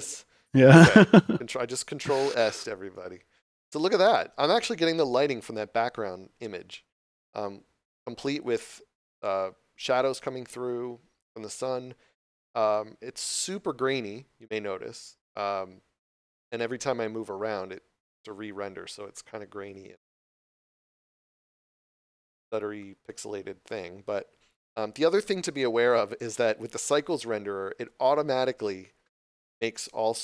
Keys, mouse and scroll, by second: 0.1 ctrl+s, 17.2 scroll down 1, 19.9 middle click, 24.0 scroll up 1, 25.2 scroll down 1, 25.3 middle click.